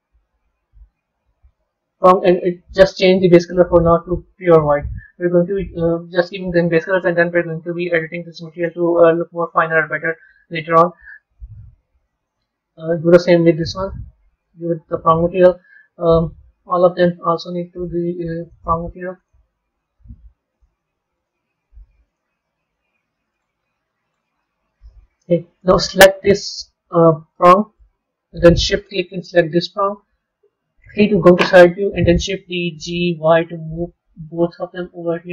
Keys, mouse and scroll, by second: 3.1 click, 7.1 drag, 8.7 click, 12.1 click, 13.4-15.6 drag, 15.6-16.8 middle drag, 16.8 click, 17.7-19.2 drag, 20.4-22.1 drag, 23.2-24.7 drag, 24.7-26.1 middle drag, 26.1 click, 26.6-27.2 scroll down 2, 27.2-29.2 middle drag, 29.2 shift+click, 30.7 KP_3, 32.3 shift+d.